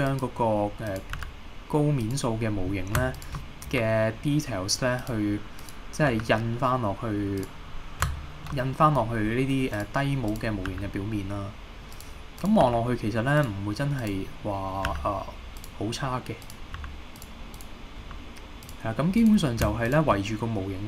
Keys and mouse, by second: 0.1 click, 1.2 g, 2.1 click, 3.7 e, 5.0 click, 6.1 g, 7.4 click, 8.2 shift+middle click, 8.8 middle click, 10.3 click, 10.7 g, 12.0 click, 12.4 click, 12.7 g, 13.4-15.0 drag, 15.0 g, 15.6 click, 16.5 click, 16.8 g, 17.2 click, 17.6 click, 18.1 g, 18.7 click, 19.9 shift+click.